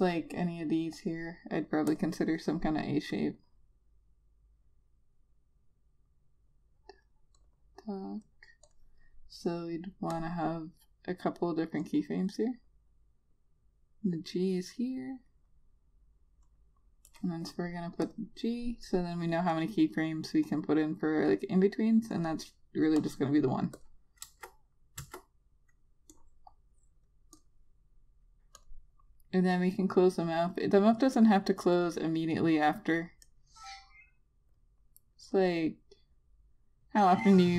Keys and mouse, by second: 2.8 click, 25.1 click, 25.9 Return, 27.0 click.